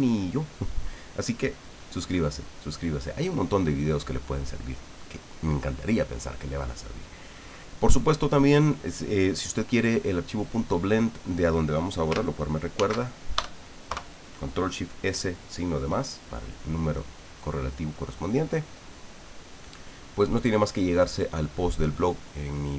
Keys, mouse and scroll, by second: 12.7 ctrl+shift+s, 13.3 ctrl+shift+KP_Add, 13.9 KP_Enter.